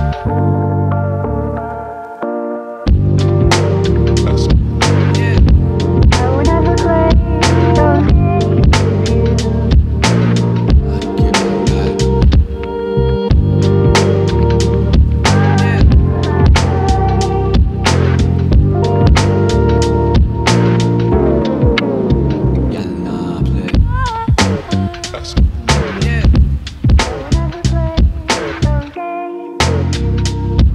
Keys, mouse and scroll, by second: 1.9 click, 2.6 click, 2.8 g, 3.6 click, 3.8 g, 4.8 click, 5.0 g, 5.7 click, 5.9 g, 8.2 click, 8.5 g, 9.7 click, 9.9 g, 10.3 click, 10.9 click, 11.0 g, 13.4-14.6 shift+middle drag, 14.6 click, 15.0 g, 16.8 g, 18.2 click, 18.3 g, 20.3 click, 20.5 g, 22.2 click, 22.4 g, 24.7 shift+middle click, 25.4 click, 26.0 g, 27.2 click, 27.4 g, 28.4 g, 29.6 click, 29.8 g.